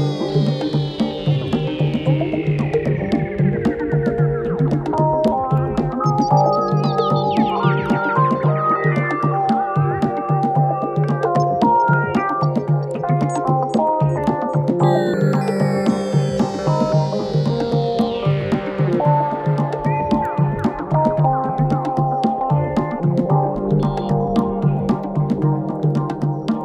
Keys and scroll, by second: 1.3 ctrl+d, 1.4 Escape, 9.3 ctrl+d, 9.3 Escape, 21.3 3, 22.4 ctrl+d, 22.5 Escape, 26.2 4.